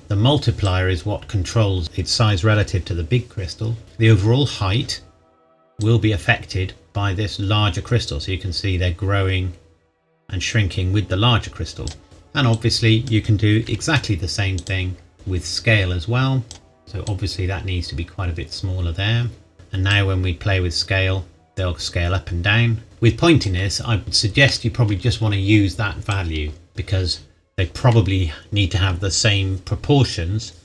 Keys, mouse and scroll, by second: 0.6 click, 5.8 click, 12.0-12.5 scroll down 1, 12.5 click, 13.6 shift+d, 14.5 click, 14.9 scroll down 1, 15.1 click, 16.8 scroll up 1, 17.0 click, 23.9 scroll down 1, 24.0 shift+middle click, 24.6-26.1 scroll down 1, 26.1 click.